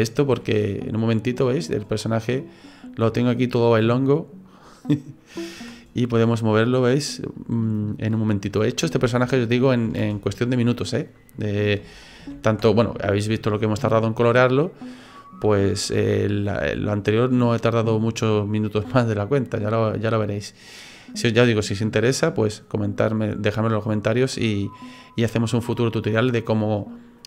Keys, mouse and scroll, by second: 0.3 g, 2.7 right click, 3.1 right click, 3.5 middle click, 4.7 right click, 5.6 g, 9.0 ctrl+z, 9.3 middle click, 10.0 ctrl+z, 10.4 middle click, 11.8 ctrl+z, 12.2 ctrl+z, 13.0 shift+middle click, 13.6 middle click, 18.9 click, 23.5 middle click, 24.5 middle click, 25.5 scroll up 1, 25.7 scroll down 2, 25.9 middle click, 26.2 middle click.